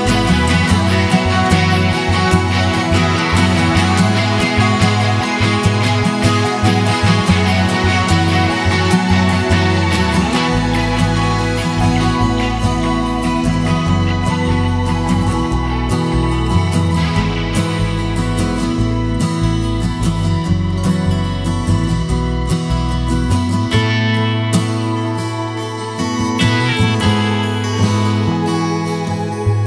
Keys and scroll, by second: 3.7 super+a, 5.1-8.7 typing, 9.0 super+a.